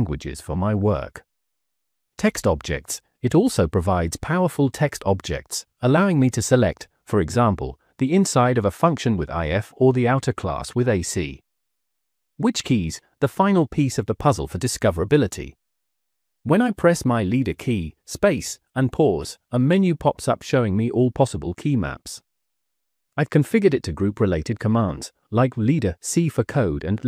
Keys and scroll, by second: 0.4-1.9 typing, 6.8 Escape, 7.3 Escape, 8.0 Escape, 8.4 Escape, 8.6 Escape, 11.8-16.3 typing, 12.3 Return, 18.8 space, 18.8 c, 19.8 Escape, 19.8 space, 19.8 c, 22.8 Escape, 23.7 Escape, 23.7 space, 26.9-27.0 typing.